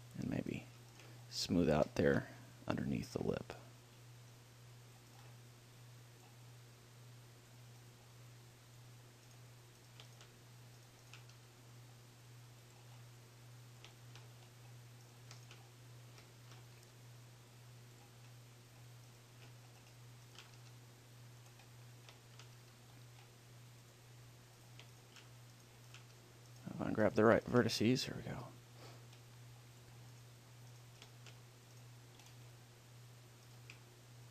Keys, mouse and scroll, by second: 0.0 click, 0.8-2.7 right drag, 1.5-3.8 middle drag, 3.8 click, 5.4-7.1 right drag, 6.0-8.4 drag, 8.0-13.1 right drag, 8.6-10.3 drag, 11.6 g, 13.1 click, 13.3 middle click, 13.4 click, 13.5-18.2 middle drag, 17.0 g, 18.3-20.0 drag, 19.3-21.9 right drag, 20.8 g, 21.8 click, 21.9 middle click, 22.6 click, 22.7 middle click, 22.8 g, 24.1-25.7 drag, 24.9 right click, 26.4 g, 28.1 g, 30.2-32.0 drag, 30.4-31.8 right drag, 32.0 right click, 32.4 middle click, 32.6-34.3 right drag, 33.0 middle click, 33.6 click.